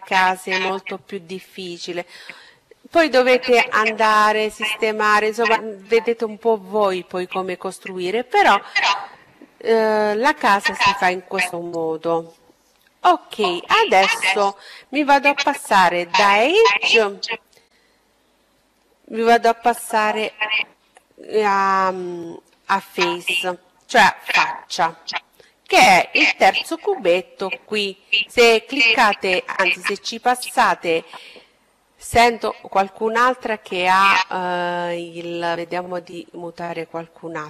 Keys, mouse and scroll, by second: 20.5-22.3 drag.